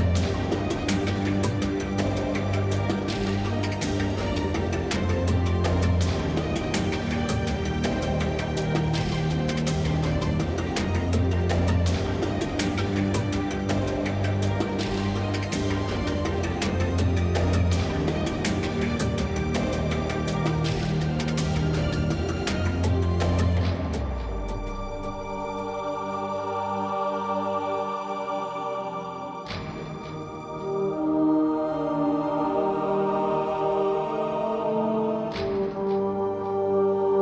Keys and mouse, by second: 0.9-2.5 typing, 1.5 ctrl+Tab, 3.1 ctrl+Tab, 4.0 ctrl+Tab, 4.5 click, 5.4 ctrl+Tab, 5.9 g, 6.1-6.6 right drag, 6.6 middle click, 8.0 s, 9.0 Tab, 9.1 Tab, 10.8 KP_7, 11.0 z, 11.3 z, 11.7 ctrl+b, 12.8 Tab, 13.4 Tab, 14.0 k, 15.0 ctrl+Tab, 15.5 ctrl+x, 15.6 ctrl+Tab, 17.3-18.4 middle drag, 18.6 middle drag, 18.8-21.1 drag, 18.9 Tab, 20.9 s, 21.7-22.6 drag, 22.4 s, 22.9 z, 23.5 ctrl+Tab, 24.4 right drag, 24.6 ctrl+Tab, 24.8-25.4 right drag, 25.8-27.3 typing, 27.3 click, 27.4 Tab, 28.2 Tab, 28.3 Tab, 28.7 KP_Divide, 28.7 middle click, 28.8 z, 29.0 a, 29.3 Tab, 29.5 z, 29.9 ctrl+Tab, 31.4 ctrl+KP_Add, 31.5 ctrl+KP_Add, 32.8 middle click, 32.9 KP_3, 33.7 KP_1, 34.0 click, 34.9-37.2 typing, 35.7 ctrl+Tab.